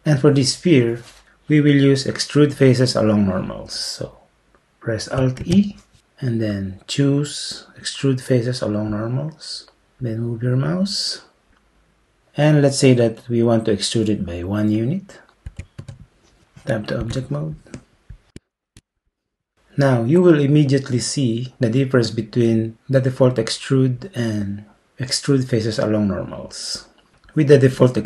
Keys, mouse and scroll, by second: 5.5 alt+e, 15.5 1, 15.8 Return, 18.2 Tab.